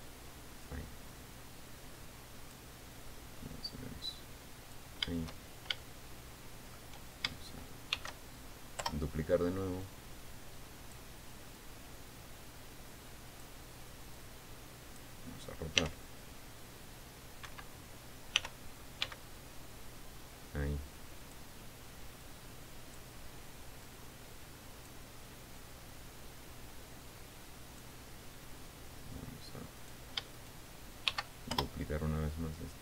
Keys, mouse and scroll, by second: 1.2-3.3 drag, 3.6-5.5 drag, 6.0 shift+scroll down 2, 6.3-7.4 shift+middle drag, 8.5 shift+d, 9.4 Return, 10.4-11.7 drag, 12.1-14.1 drag, 14.7 click, 16.3 r, 18.0 Escape, 18.9 r, 19.6 x, 21.8 click, 22.8 click, 24.4 click, 26.1-28.5 drag, 30.3 right click, 30.9 shift+right click, 31.6 shift+d, 32.1 shift+Return.